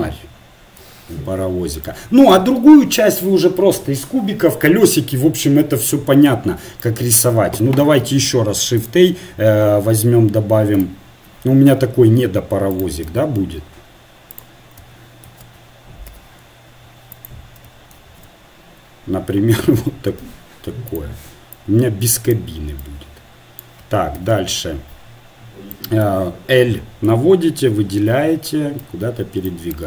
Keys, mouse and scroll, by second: 1.1 g, 8.8 shift+a, 10.7-12.7 drag, 11.7 s, 13.1 g, 15.3 shift+d, 17.9 shift+r, 20.2 s, 21.9-23.5 drag, 24.3 KP_1, 27.1 l, 28.1 l.